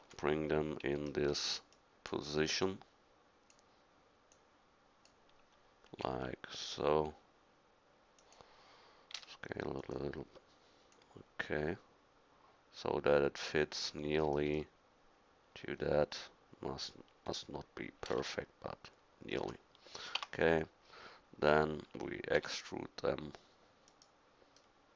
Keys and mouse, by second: 0.0 KP_1, 6.0 r, 9.2 s, 10.9-12.3 drag, 18.1 r, 20.2 Tab, 22.4 e, 22.5-23.7 right drag.